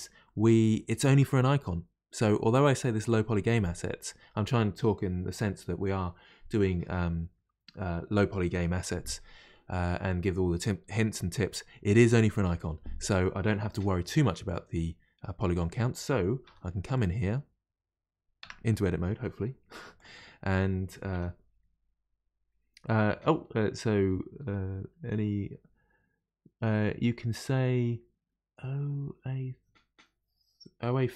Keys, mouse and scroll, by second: 0.3-3.3 middle drag, 3.8-6.8 middle drag, 13.2-14.2 middle drag, 14.2 3, 14.5-15.5 middle drag, 15.5 click, 16.4 3, 17.0 click, 18.4 Tab, 20.0 click, 21.1 3.